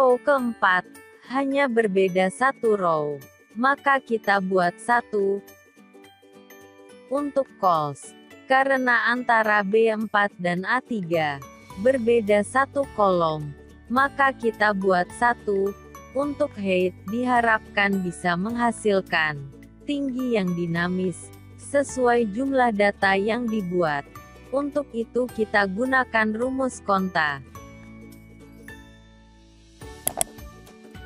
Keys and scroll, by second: 30.9 F4.